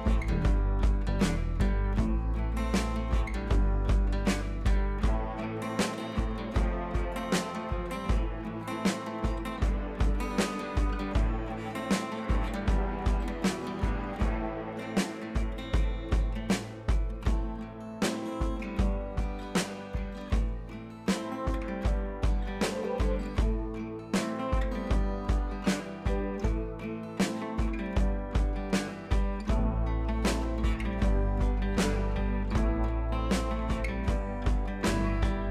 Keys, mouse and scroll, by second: 5.5-5.9 drag, 12.9-17.1 drag, 33.2-33.6 shift+drag.